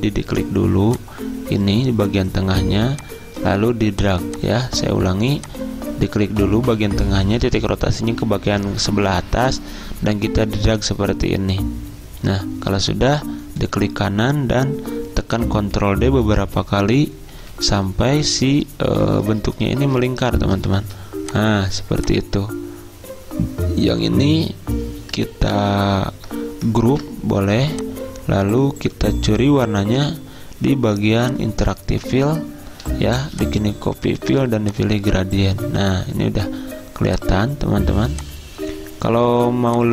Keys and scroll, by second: 15.3 ctrl+d, 15.5 ctrl+d, 27.0 ctrl+g.